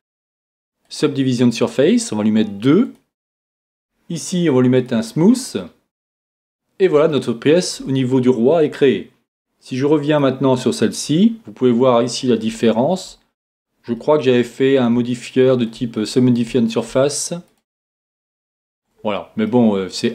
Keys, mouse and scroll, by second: 1.2 click, 2.8-7.1 drag, 5.6-10.2 middle drag, 10.2-11.8 drag, 10.8-17.5 middle drag, 17.5-18.5 right drag, 18.5 Tab, 18.8 click, 19.4-20.1 middle drag.